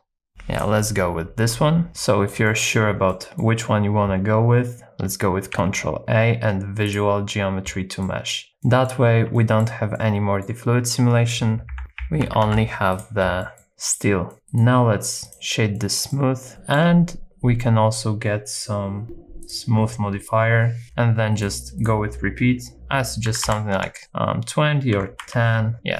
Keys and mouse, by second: 0.3 Right, 0.3 Left, 2.0 middle click, 2.5 shift+middle click, 3.1 middle click, 5.5 ctrl+a, 8.0 middle click, 8.6 middle click, 9.3 shift+middle click, 9.9 middle click, 11.7 Left, 12.0 Left, 12.2 Right, 12.5 Right, 13.0 click, 13.4 middle click, 14.5 right click, 15.8 middle click, 16.6 shift+middle click, 19.0 click, 20.8 click, 21.8-23.9 drag, 24.0-25.6 drag.